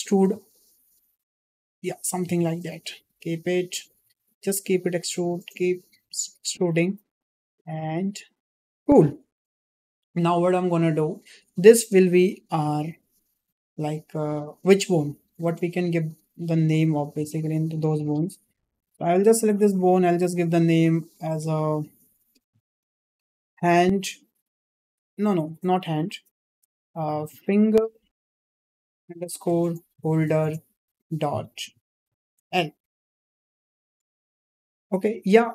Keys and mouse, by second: 0.3 e, 1.9 click, 2.2 e, 3.8 click, 4.0 e, 5.7 click, 5.9 e, 7.4 click, 7.8 e, 17.6 click, 20.0-35.5 drag, 25.5 BackSpace, 25.6 BackSpace.